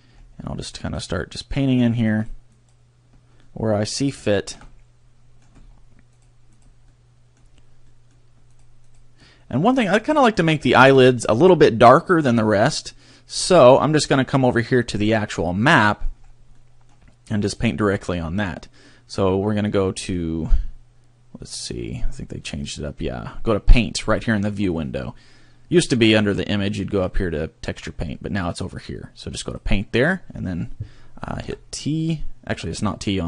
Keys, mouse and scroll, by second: 0.1 scroll up 2, 0.7 click, 1.5 click, 2.1 click, 2.5 click, 3.4 middle click, 4.3 shift+middle click, 4.7 middle click, 5.5-5.9 scroll down 3, 6.1 click, 6.6 click, 6.9 middle click, 7.8 middle click, 8.5 click, 8.9 click, 9.7-10.0 scroll up 2, 10.0 middle click, 10.7 shift+middle click, 11.1 middle click, 14.7 click, 15.6 middle click, 16.3 scroll up 1, 16.5 middle click, 17.4 click, 22.6 click, 26.2 click, 28.5 click, 31.6 t, 32.5 t.